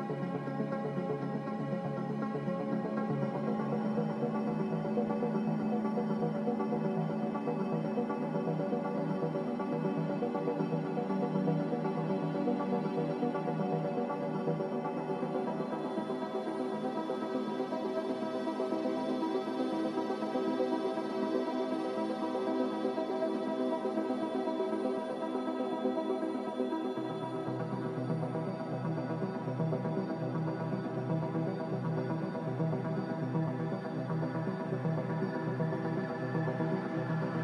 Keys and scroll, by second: 31.2 a, 33.5 2, 33.9 Return, 34.3 Return.